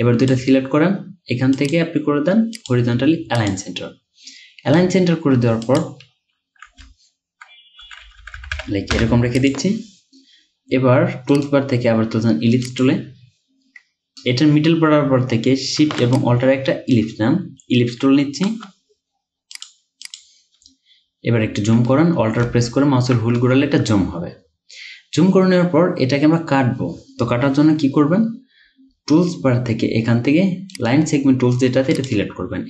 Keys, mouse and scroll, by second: 6.8 x, 11.4 right click, 16.2 alt+shift+click, 21.1-21.5 alt+scroll up 1, 22.2-25.9 scroll up 2, 30.8 right click.